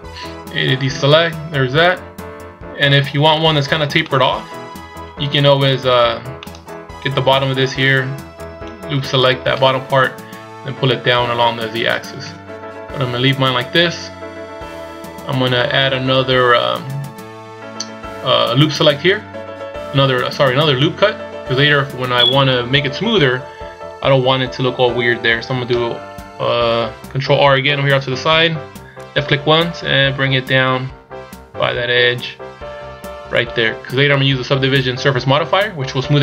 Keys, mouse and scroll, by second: 0.1 z, 3.1 z, 4.1 middle click, 5.9 a, 6.4 middle click, 8.4 alt+right click, 12.2 KP_1, 14.8 a, 27.9 ctrl+r.